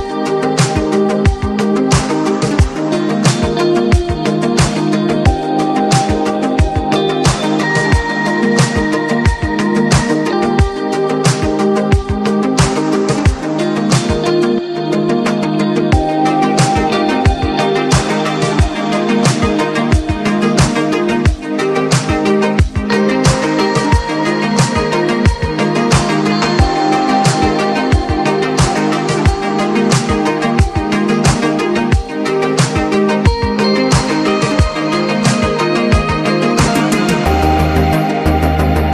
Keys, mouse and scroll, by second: 0.8 click, 3.6 click, 6.6 click, 10.9 click, 12.9 click, 16.1-18.4 drag, 18.4 ctrl+z, 19.6 click, 20.6 click, 24.9 click, 26.9 click, 28.6 click, 30.4 click, 33.3 ctrl+z, 34.1 click, 36.3 alt+scroll down 1, 37.9 alt+scroll down 1, 38.1 alt+scroll up 1.